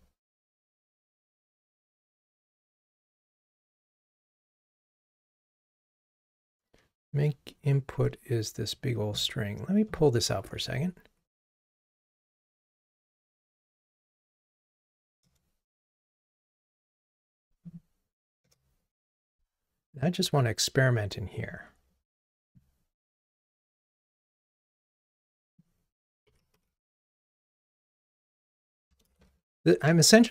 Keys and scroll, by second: 10.5 alt+Up, 12.9 alt+super+v, 15.2 alt+super+v, 15.3 Return, 19.4 super+v, 23.3 super+/, 27.1 Escape.